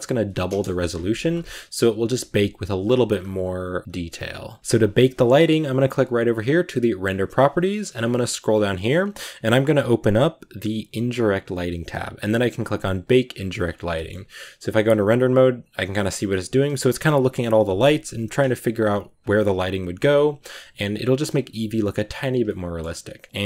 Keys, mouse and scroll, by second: 0.4 click, 0.5 KP_0, 1.4 z, 1.8 a, 3.0 scroll down 2, 3.8 scroll up 1, 13.3 z, 13.7 click, 14.2-14.7 shift+middle drag, 14.7 click, 16.0 click, 19.3 click, 20.0 click, 21.1 click, 21.8-22.1 drag, 22.3 shift+middle click, 22.8-23.4 scroll up 6.